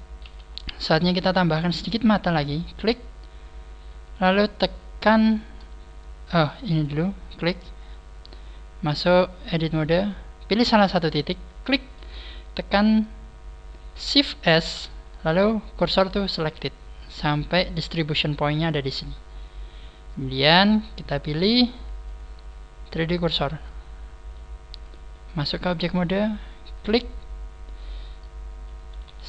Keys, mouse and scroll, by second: 0.2 shift+middle click, 0.2 KP_1, 1.3 shift+middle click, 1.9 scroll up 3, 2.5 right click, 2.5 scroll up 1, 6.4 right click, 9.7 click, 10.4-10.8 scroll up 8, 11.4 right click, 11.4-12.4 scroll up 1, 16.3 shift+s, 17.6-18.8 scroll up 3, 18.8 scroll down 1, 19.2-19.7 scroll down 14, 21.0 click, 22.0 click, 23.6 click, 25.6 click, 28.4 right click, 28.8 g.